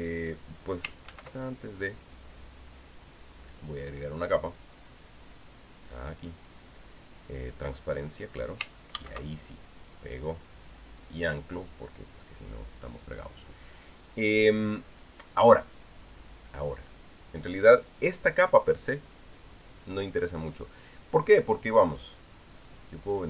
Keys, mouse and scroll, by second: 1.9 ctrl+z, 6.7 click, 8.5 click, 9.7 ctrl+v, 11.8 click.